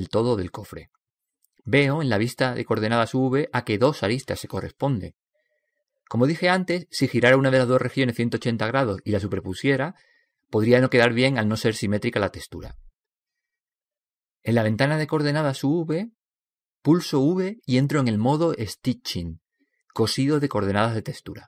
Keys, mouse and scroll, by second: 18.1 v.